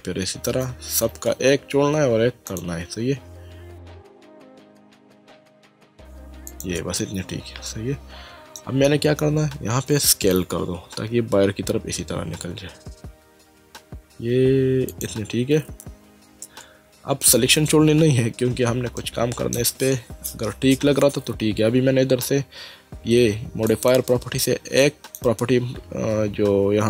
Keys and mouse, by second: 2.5 alt+shift+click, 3.1 alt+shift+click, 3.5 alt+shift+click, 4.8 alt+shift+click, 5.1 middle click, 5.6 click, 6.5 alt+shift+click, 7.7 middle click, 11.1 s, 14.9 click, 19.0 middle click, 23.7 click, 24.8 click.